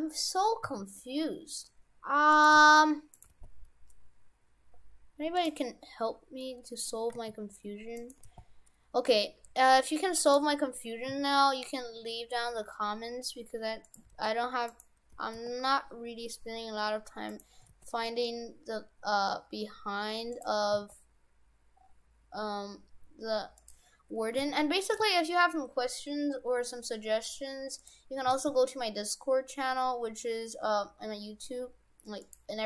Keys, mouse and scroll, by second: 0.6 scroll up 1, 0.6 s, 2.5 g, 3.3 g, 5.7-6.4 scroll up 6, 6.4 middle click, 7.1 g, 8.2 g, 11.1 s, 14.0 g, 15.1 g, 17.6 g, 20.6 g, 20.8 s, 24.4 g, 25.0 g, 28.0 g, 28.3 s.